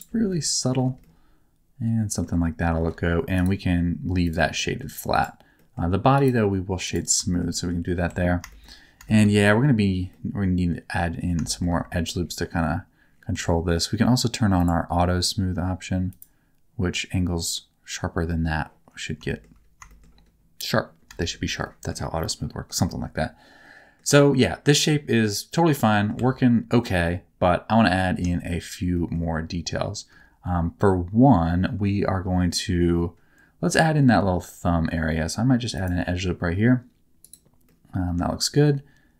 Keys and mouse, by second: 0.2 middle click, 1.0-2.2 shift+middle drag, 3.4 click, 4.5 middle click, 5.1 click, 5.5 middle click, 6.1 right click, 7.3 shift+middle click, 7.5 middle click, 8.0 Tab, 8.4 shift+middle click, 9.0 shift+middle click, 10.1 middle click, 11.4 shift+middle click, 13.3 Tab, 14.5 click, 16.0 click, 19.2 shift+middle click, 19.8 shift+middle click, 21.1 shift+middle click, 21.6 middle click, 22.1 middle click, 22.8-23.9 middle drag, 24.1 shift+middle click, 24.7 middle click, 25.9 middle click, 26.1 Tab, 28.9 middle click, 34.0 ctrl+r, 37.2 click, 37.6 middle click.